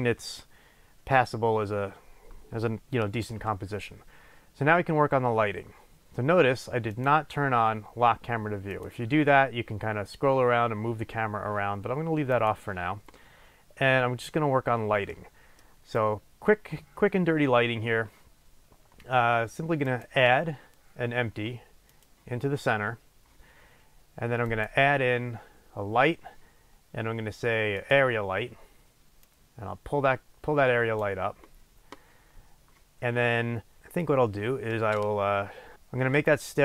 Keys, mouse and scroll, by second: 8.9 click, 9.6-10.1 scroll down 2, 10.1-11.9 scroll up 2, 11.9-12.5 scroll up 1, 12.5 click, 15.3 middle click, 16.0-17.4 scroll down 2, 17.4-19.5 scroll up 2, 19.5-20.1 scroll up 1, 20.1-36.6 drag.